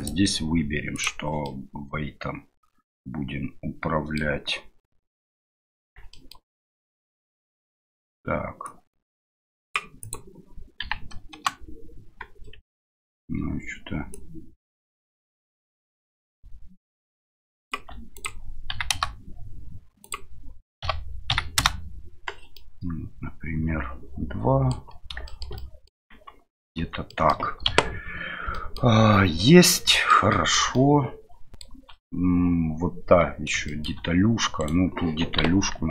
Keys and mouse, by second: 0.0-1.0 drag, 1.4-4.2 middle drag, 6.1 shift+middle click, 10.1-12.2 drag, 12.6 Tab, 14.2-17.7 drag, 18.2-19.6 drag, 20.1-22.2 drag, 22.5-24.7 middle drag, 25.2 shift+middle drag, 25.5-25.9 middle drag, 26.1 Tab, 27.1 middle click, 27.7 KP_Divide, 28.5 middle click, 30.1 drag, 30.3 shift+click, 30.7 shift+middle drag, 33.7 shift+middle click.